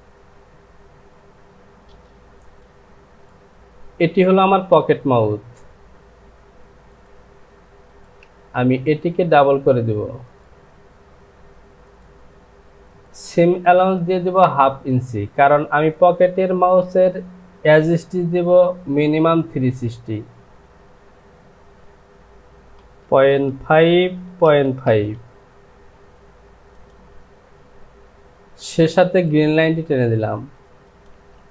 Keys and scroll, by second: 1.9 Return, 22.8 KP_Decimal, 23.3 KP_5, 24.0 Down.